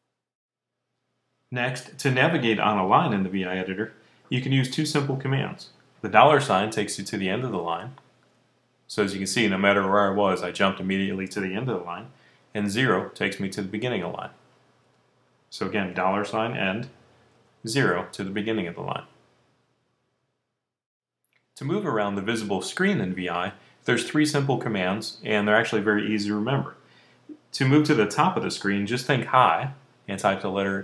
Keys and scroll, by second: 7.5 shift+4, 12.8 0, 15.8 shift+4, 17.2 0, 19.0-20.4 typing.